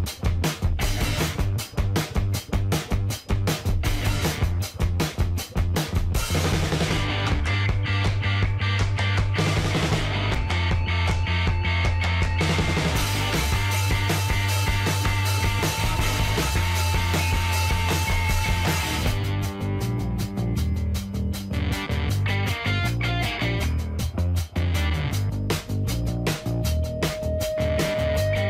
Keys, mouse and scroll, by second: 2.0 click, 3.9 click, 6.1 e, 6.7 z, 14.1 click, 14.7-23.0 middle drag, 25.7-28.4 middle drag.